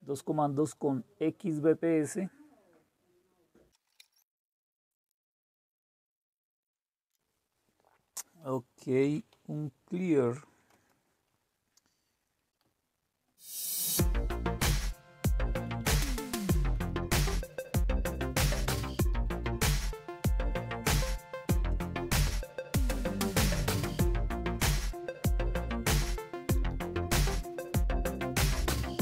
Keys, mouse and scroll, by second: 5.2 click, 8.7-10.3 typing, 10.6 Return, 12.5-14.7 Left, 12.5 typing, 14.9-16.2 typing, 16.6 Return, 18.1-21.1 typing, 23.8 Return, 24.0-27.1 typing.